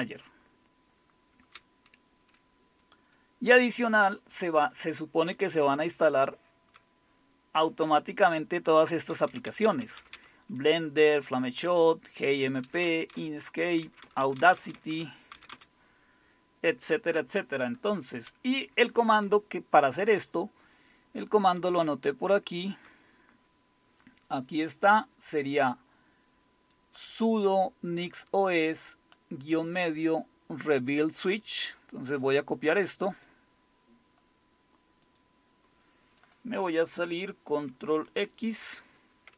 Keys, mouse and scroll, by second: 0.0 Down, 0.1-1.5 Down, 2.2 Page_Down, 2.7 Page_Down, 3.0 Page_Down, 4.1-4.8 typing, 5.6 Down, 6.1 Down, 6.2-6.6 Down, 7.6 Down, 8.9-9.6 typing, 9.6 Up, 9.8 Up, 10.1 Up, 12.5 Down, 13.1 Down, 13.6 Down, 13.8 Down, 14.0 Down, 14.4 Down, 14.6 Down, 14.7 Down, 15.3 Down, 15.3 typing, 15.5 Down, 19.7 Up, 19.8-21.0 Up, 21.6 Up, 21.8-22.8 Up, 26.7-32.1 drag, 33.1-35.0 right drag, 35.0 click, 36.1 click, 38.6 ctrl+x.